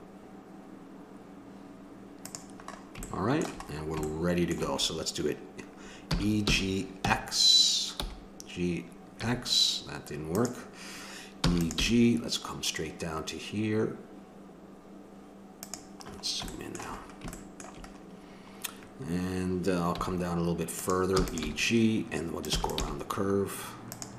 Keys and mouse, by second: 2.6-4.8 middle drag, 6.1 e, 11.4 e, 11.7 g, 16.7 middle click, 19.9 g, 21.1 e, 21.4 g, 22.5 e, 22.8 g.